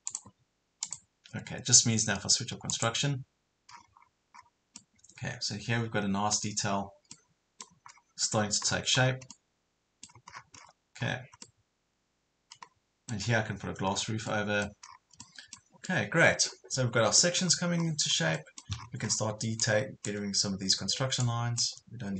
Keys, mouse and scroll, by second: 3.7 scroll down 1, 4.3 scroll up 1, 4.8-6.7 middle drag, 6.7 scroll down 1, 7.2 middle click, 7.9 scroll down 1, 8.3 scroll up 1, 9.3 middle click, 10.3 scroll down 1, 11.4-13.6 middle drag, 13.9 scroll down 1, 14.3 middle click, 14.8 scroll down 1, 15.2 middle click, 17.4 scroll down 1, 17.8 scroll up 1, 18.8 scroll down 1, 19.6-20.6 drag, 20.1 Delete, 21.2 click, 21.7 Delete.